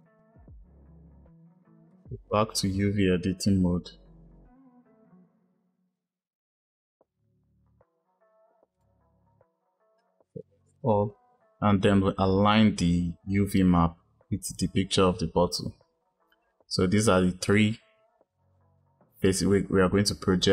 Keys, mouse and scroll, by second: 0.0 click, 1.9-8.7 drag, 9.8 a.